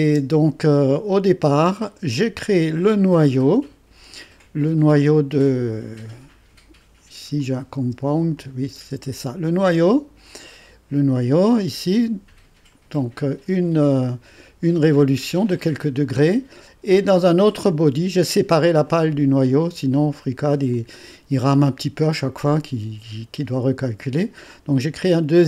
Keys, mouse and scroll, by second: 0.0 space, 2.1-3.2 drag, 7.4 click, 7.8-8.8 typing, 8.4 click, 9.7 click, 11.5-13.0 drag, 18.8 click, 20.7-22.1 drag.